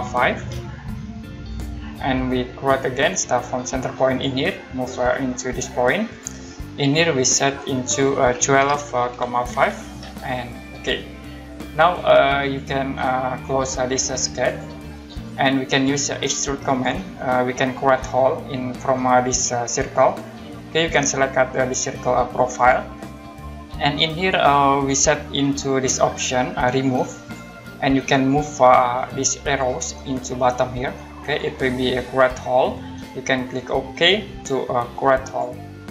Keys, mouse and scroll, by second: 0.0-0.5 typing, 1.5 click, 4.0 click, 6.1 click, 8.1-10.0 typing, 10.7 click, 12.4 click, 14.5 click, 16.6 click, 22.5 click, 27.2 click, 29.7 click, 35.2 click.